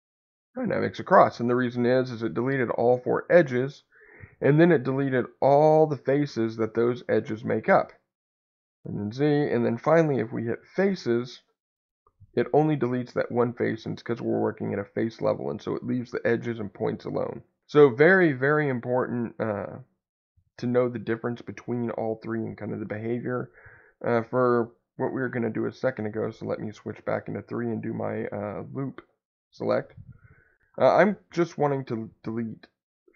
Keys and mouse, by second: 8.8 ctrl+z, 10.3 x, 23.0 ctrl+z, 25.0 3, 27.5 alt+click, 28.4 alt+click.